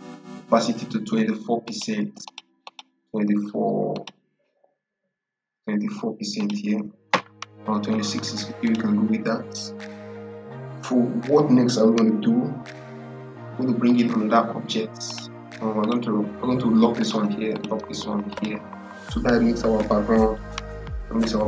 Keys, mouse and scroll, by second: 1.5 click, 6.3 click, 13.7 click.